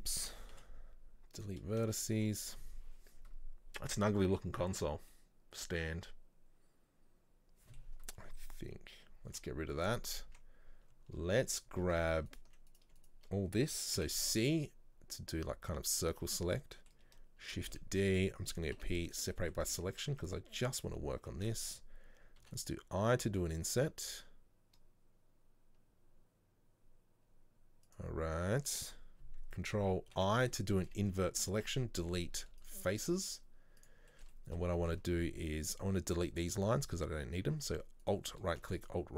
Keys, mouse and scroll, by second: 1.5 Delete, 1.9 shift+middle click, 2.2 Tab, 2.6-9.4 middle drag, 9.4 Delete, 10.2 right click, 10.4 Tab, 11.6 click, 12.4 alt+right click, 12.8 right click, 13.1 shift+right click, 14.3 c, 16.7 middle click, 17.5 shift+d, 19.2 p, 19.4 middle click, 19.8 Tab, 20.0 right click, 20.2 Tab, 20.4 middle click, 21.4 a, 32.8 Delete, 33.9 click, 34.2-38.1 shift+middle drag, 38.1 alt+right click, 38.8-39.1 alt+shift+right drag.